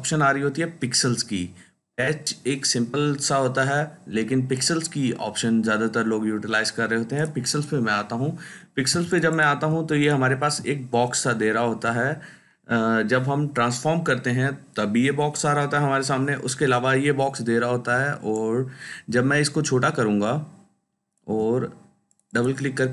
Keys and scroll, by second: 8.8 ctrl+space.